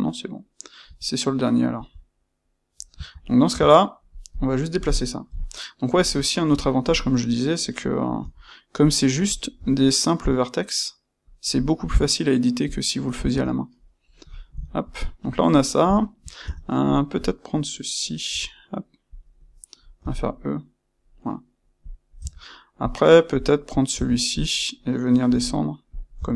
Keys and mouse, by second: 4.3 click, 5.2 KP_1, 6.0 click, 6.2-9.2 ctrl+middle drag, 8.1 g, 9.2 click, 9.5 g, 11.3 click, 12.6 click, 13.8-17.2 middle drag, 17.2 click, 18.2 g, 19.1 click, 19.4-21.8 middle drag, 20.0 e, 21.8 click, 23.3 click, 23.9 Tab, 24.2 click, 25.2 g, 25.9 click, 26.1 Tab.